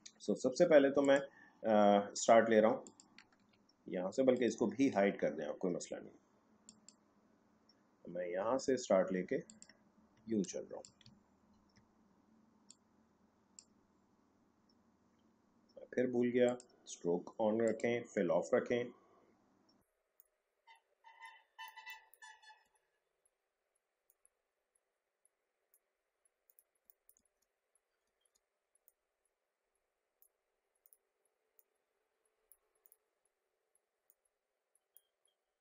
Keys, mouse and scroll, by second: 1.0 click, 2.8 ctrl+click, 6.6 click, 9.4 click, 10.6 space, 11.2 alt+scroll up 1, 12.6 click, 16.4 click, 20.2 click, 21.8 space, 21.8 click, 22.0 space, 22.4 alt+scroll down 1, 24.0-26.4 drag, 26.8 space, 27.0 click, 27.2 alt+scroll up 1, 28.0 scroll, 28.1-28.8 alt+scroll down 2, 28.8-33.9 drag, 34.0-35.6 drag.